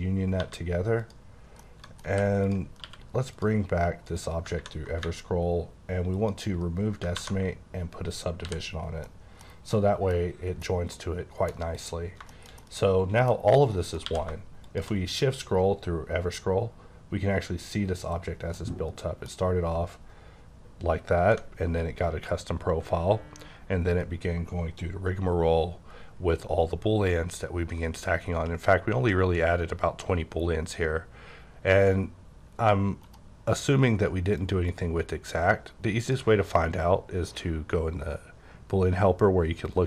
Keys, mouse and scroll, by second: 0.4 1, 1.0 click, 1.6 middle click, 2.1 h, 2.4 click, 2.8 q, 3.4 click, 4.1 click, 6.1 click, 7.2 ctrl+1, 8.4 h, 8.8 scroll down 1, 9.0 middle click, 9.4 scroll down 3, 9.7 middle click, 10.6-11.4 KP_1, 11.5 KP_1, 11.7 click, 12.3 shift+middle click, 14.0 q, 14.6 shift+click, 15.2-16.8 scroll up 15, 16.8-18.1 scroll down 18, 18.6 middle click, 20.6-21.4 scroll up 1, 23.1-23.9 scroll up 3, 23.9-25.4 scroll up 4, 25.4-29.4 scroll up 18, 29.4-30.2 scroll down 4, 30.2-30.7 scroll up 8, 31.2-31.7 scroll down 7, 31.7-33.1 scroll up 9, 33.1 right click, 34.4 click, 36.0 click.